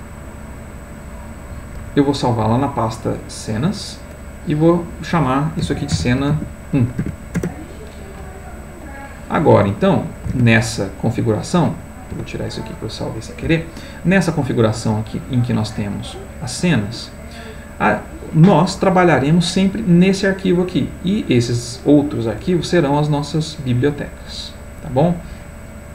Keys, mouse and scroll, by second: 0.0 click, 1.2 click, 3.3 click, 4.7 click, 5.7-7.0 typing, 7.3 Return, 8.8 click, 10.5 alt+Tab, 11.5 click, 12.1 Delete, 15.3 click, 21.1 click.